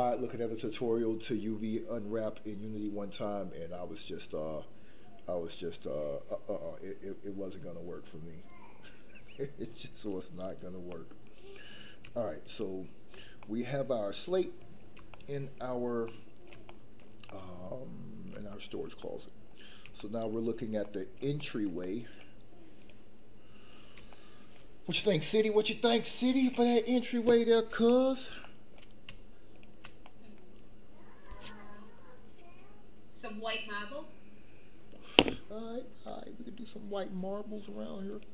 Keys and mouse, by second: 10.9 middle click, 12.5 click, 13.4-14.6 middle drag, 15.1 shift+middle click, 16.0 middle click, 16.7 shift+middle click, 17.3-18.3 middle drag, 18.5 shift+middle click, 19.0 middle click, 19.9 shift+middle click, 20.8 middle click, 21.3 shift+middle click, 21.8 middle click, 24.1 shift+middle click, 28.4 shift+middle click, 29.5 shift+click, 30.0 middle click.